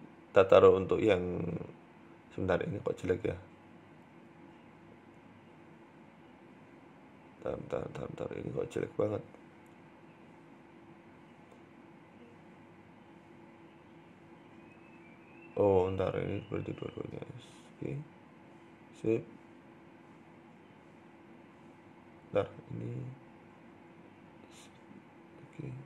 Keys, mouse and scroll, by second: 0.7 scroll up 1, 1.1 shift+middle click, 1.3 Tab, 1.4 right click, 1.7-2.5 scroll up 3, 1.9 shift+middle click, 2.1 Tab, 2.6 shift+middle click, 3.8 click, 4.6 scroll up 2, 5.2 middle click, 5.6 KP_3, 6.6 ctrl+KP_1, 7.1-7.5 scroll down 5, 7.5 shift+middle click, 7.7 scroll up 2, 7.9 shift+middle click, 8.7 KP_3, 9.2-9.5 scroll up 1, 10.1 right click, 10.4 alt+shift+right click, 11.7 right click, 11.9 alt+shift+right click, 12.4 right click, 12.7 alt+shift+right click, 13.2 a, 13.3 a, 13.5 alt+shift+right click, 14.1 s, 15.3 right click, 15.7 right click, 16.1 alt+shift+right click, 16.3 alt+shift+right click, 16.6 s, 17.9 click, 19.3 r, 20.5 s, 21.4 ctrl+z, 21.6 ctrl+z, 22.6 click, 24.2 g, 25.3 click.